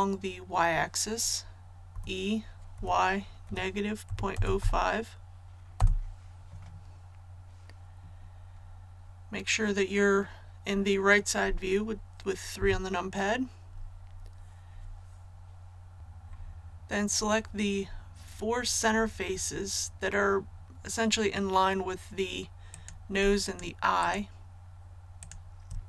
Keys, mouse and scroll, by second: 1.8-2.7 typing, 4.0 KP_Decimal, 4.3 KP_0, 4.5 KP_5, 5.7 Return, 12.5 KP_3, 22.7 right click, 23.4 shift+right click, 23.9 shift+right click, 25.1 shift+right click.